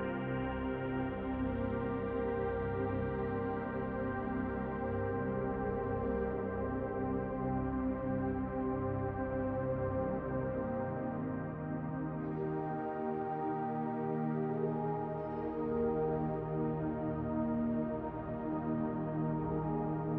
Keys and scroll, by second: 1.1 shift+d, 2.9 d.